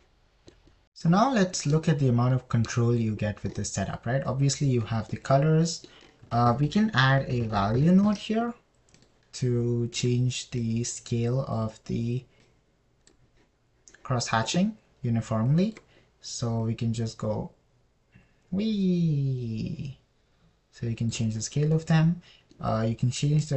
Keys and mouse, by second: 3.1 middle click, 6.5 middle click, 7.7 shift+a, 11.4 drag, 12.0 drag, 16.9 middle click, 18.2-19.5 middle drag, 19.5-22.5 drag, 20.0-22.5 right drag, 23.1 middle click.